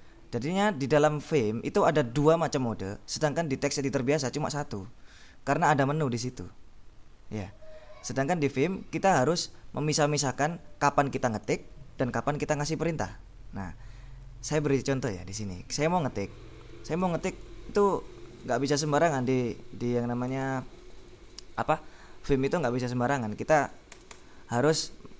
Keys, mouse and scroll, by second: 16.9-18.1 typing, 18.3 Escape, 20.3 x, 24.0 Escape.